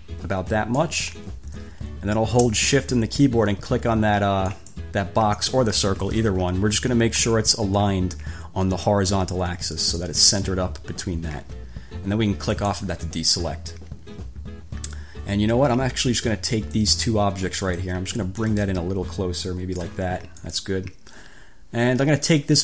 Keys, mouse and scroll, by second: 4.7 shift+click, 10.0 click, 12.7 click, 16.9-18.2 drag, 18.6-20.2 ctrl+drag, 20.6 click.